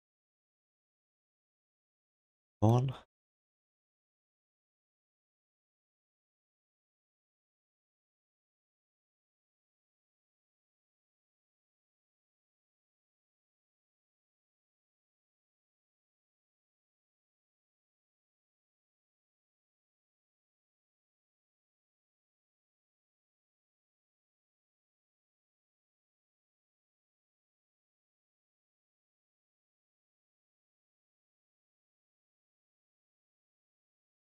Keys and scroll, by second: 3.0 ctrl+s.